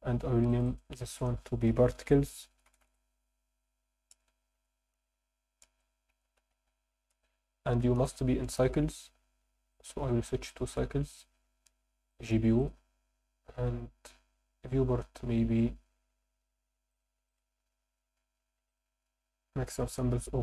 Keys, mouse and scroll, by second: 0.5 click, 0.7-8.0 drag, 4.3 BackSpace, 9.7 click, 10.4-11.2 drag, 12.1-12.7 drag, 16.9 click, 17.3-18.6 drag, 18.7-20.4 drag.